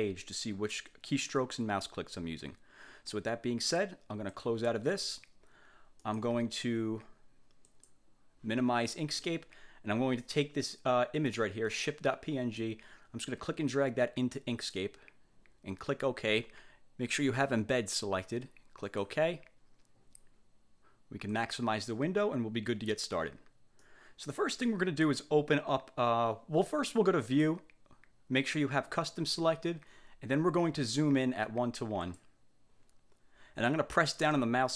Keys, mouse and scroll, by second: 4.5 click, 6.1 click, 7.8 click, 11.3 click, 12.7-15.1 drag, 19.0 click, 21.4 click, 23.9-24.9 drag, 27.3 click, 32.1 click, 34.5-34.7 drag.